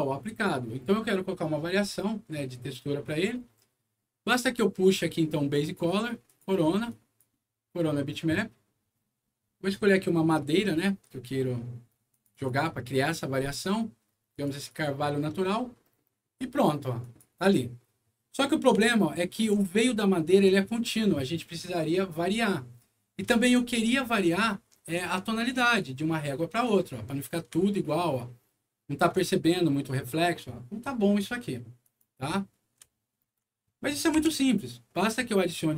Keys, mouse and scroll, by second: 2.5 middle click, 3.4 middle click, 4.8 click, 6.2 click, 6.8 click, 9.6 click, 12.0 click, 12.2 click, 14.2 click, 14.5 click, 16.9 click, 18.3 scroll up 1, 18.8 alt+middle click, 19.8 alt+scroll up 1, 20.9 alt+scroll down 2, 22.8 scroll down 2, 23.3 alt+middle click, 25.4 alt+click, 27.7-29.0 alt+middle drag, 30.0 alt+middle click, 31.7 alt+click, 32.8 alt+middle click, 33.5 alt+middle click, 34.1 m, 34.8 middle click, 35.5 click.